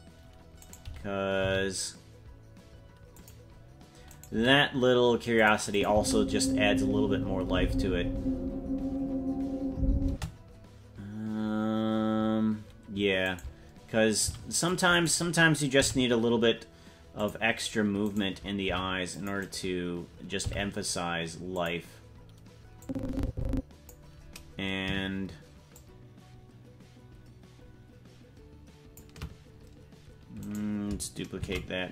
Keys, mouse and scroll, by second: 0.6 right click, 1.3 g, 4.1 right click, 4.3 g, 5.7 click, 5.9 space, 10.0 space, 13.2 right click, 14.2 c, 15.7 g, 18.0 right click, 18.6 c, 20.3 g, 22.8-23.9 drag, 25.7-29.0 shift+drag, 30.5 right click, 31.4 shift+d.